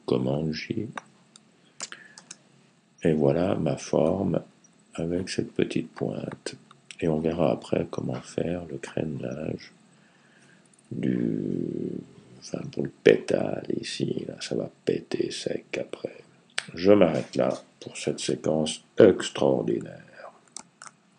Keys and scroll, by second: 1.9 super+j.